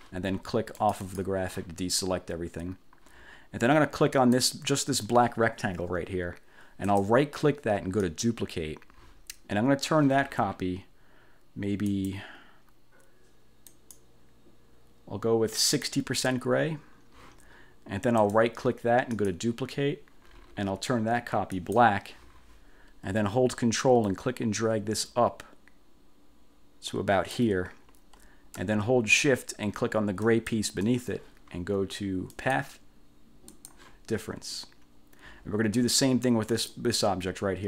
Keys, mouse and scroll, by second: 0.9 click, 4.3 click, 7.0 click, 8.1 click, 12.0 click, 13.8 click, 15.7 click, 18.3 click, 19.3 click, 21.7 click, 24.1-27.7 ctrl+drag, 30.3 shift+click, 32.5 click, 33.6 click, 36.6 click.